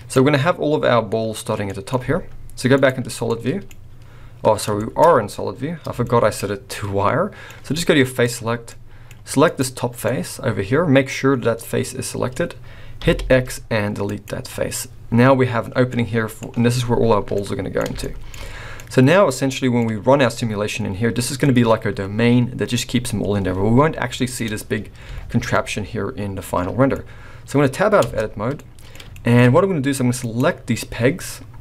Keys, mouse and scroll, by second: 1.6 middle click, 1.9 z, 3.3 middle click, 4.8 shift+middle click, 4.8-5.2 shift+scroll up 4, 6.0 shift+middle click, 6.7 middle click, 8.2 click, 8.7 middle click, 9.4 click, 10.1 middle click, 13.0 x, 14.7-15.4 scroll down 1, 15.9 middle click, 17.3 middle click, 18.0 shift+middle click, 18.7 middle click, 24.3 click, 25.0 a, 25.5 middle click, 28.0 Tab, 28.5 middle click, 29.1 shift+middle click, 29.4-30.2 scroll up 2, 30.2 click.